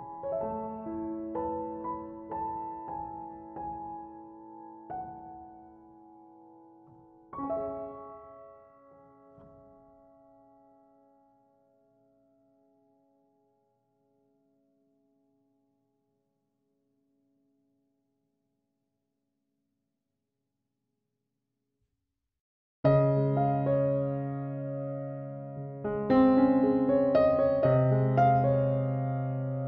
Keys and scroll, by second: 10.9-11.6 typing, 17.4-18.1 typing.